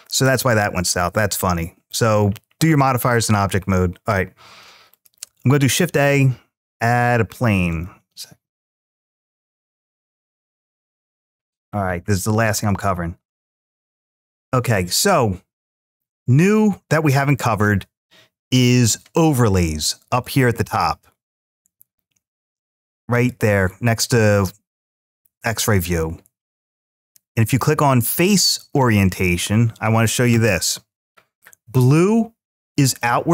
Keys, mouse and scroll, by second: 4.7 click, 5.3 ctrl+a, 7.5 click, 9.3 shift+a, 11.5-11.9 scroll up 2, 12.4-13.1 middle drag, 12.4-12.9 scroll up 4, 13.5-14.1 shift+middle drag, 16.7-19.1 drag, 20.0 click, 22.9-24.0 drag, 25.2-28.7 drag, 32.8-33.3 middle drag.